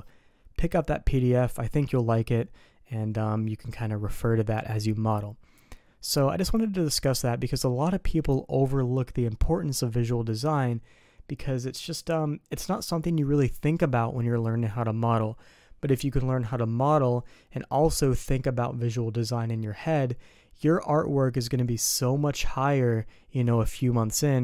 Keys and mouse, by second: 6.1-7.6 middle drag.